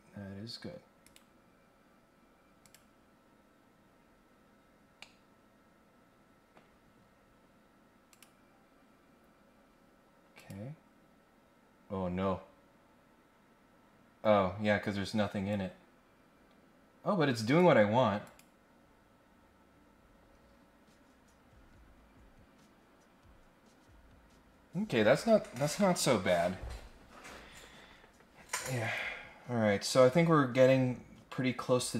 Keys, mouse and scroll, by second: 1.0 right click, 2.6 click, 3.9-4.2 scroll down 1, 4.5 scroll up 1, 5.0-6.5 middle drag, 8.1 click, 9.1 scroll down 2, 9.4 scroll up 2, 10.3 click, 15.4-17.6 drag, 18.2 click, 27.7 scroll up 1, 28.7 click, 30.0 right click.